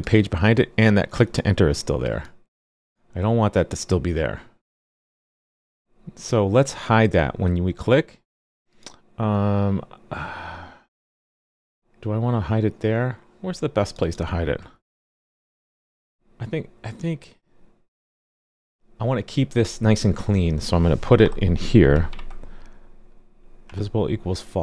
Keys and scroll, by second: 5.2 super+r, 14.9 super+c, 22.0 super+v.